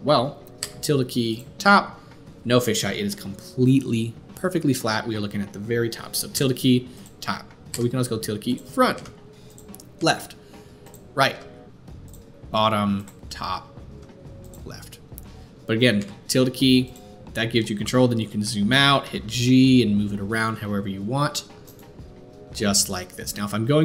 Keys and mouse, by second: 1.4 `, 7.7 `, 8.9 `, 9.9 `, 11.3 `, 12.5 `, 13.9 `, 15.9 `, 19.0 g, 22.4 g.